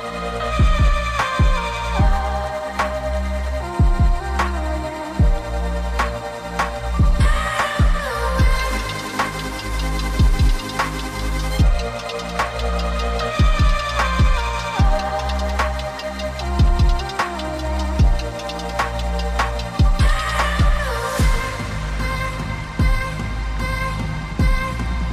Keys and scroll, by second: 16.9 g.